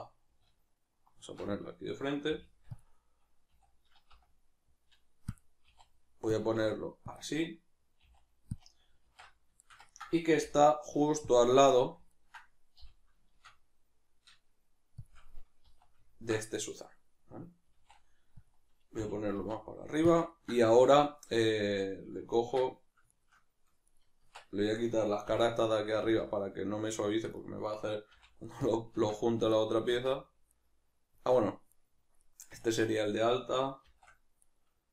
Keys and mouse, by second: 0.4 alt+q, 9.0 alt+q, 9.6-15.0 ctrl+shift+middle drag, 10.4 g, 12.7 g, 15.0 shift+click, 15.3-17.6 middle drag, 15.6 z, 17.6 s, 19.0 g, 20.3-23.1 ctrl+middle drag, 23.1 shift+right click, 23.9 right click, 24.2 Tab, 25.4 right click, 26.0 z, 27.0 shift+right click, 27.4 middle click, 28.1 x, 29.5 right click, 31.7 right click, 32.2-33.8 middle drag, 33.8 shift+d, 34.6 right click.